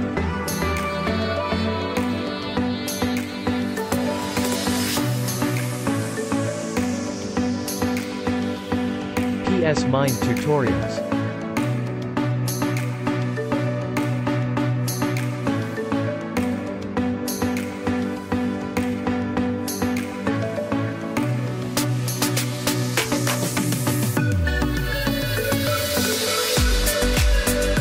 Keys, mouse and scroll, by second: 4.5 click, 8.0 click, 11.9 click, 15.9 click, 26.8 click, 26.8 click.